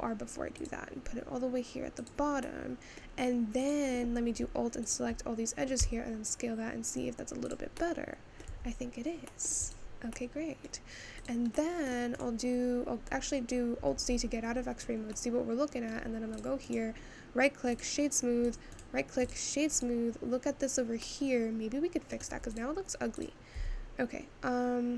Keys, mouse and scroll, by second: 2.5-3.7 middle drag, 3.7 click, 5.8 s, 7.8 middle click, 8.7 Tab, 9.4 middle click, 9.6 click, 10.4 middle click, 11.0-11.5 scroll down 2, 11.5 click, 11.9-14.0 middle drag, 14.0 alt+z, 14.7 scroll down 3, 15.1 scroll up 1, 15.3 middle click, 15.9-16.7 scroll up 4, 16.7-18.5 right drag, 18.5 click, 18.7-19.8 right drag, 19.8 click, 21.0-22.6 middle drag, 22.6 click, 23.2 click, 23.7 Tab.